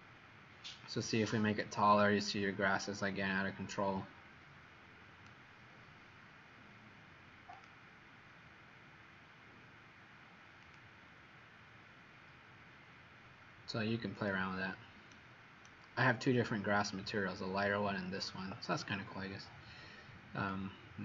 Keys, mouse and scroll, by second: 0.7 click, 15.0 right click, 20.6 click.